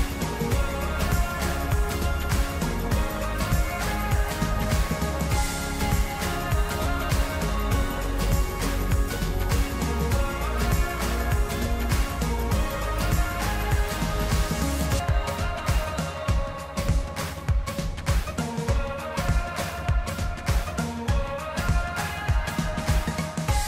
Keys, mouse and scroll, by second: 0.2 click, 7.1-16.1 drag, 17.3-23.6 drag.